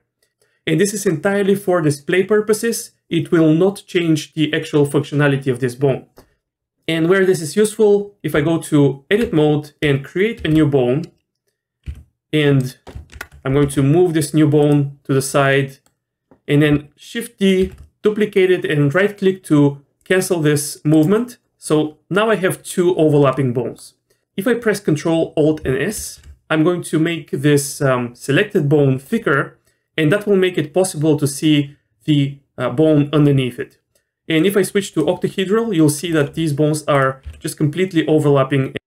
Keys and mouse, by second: 8.3 Tab, 10.4 shift+a, 11.9 g, 13.1 ctrl+KP_Add, 13.6 g, 15.5 click, 17.6 shift+d, 23.3 middle click, 26.0 ctrl+alt+s, 34.5 click, 37.2 g.